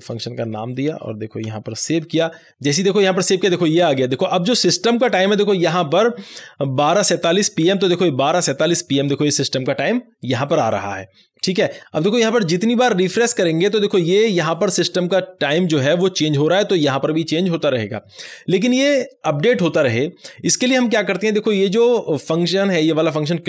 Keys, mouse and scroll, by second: 0.7 Right, 1.4 ;, 2.0 ctrl+s, 13.0 ctrl+s, 13.0 click, 21.5 click, 21.6 scroll up 1.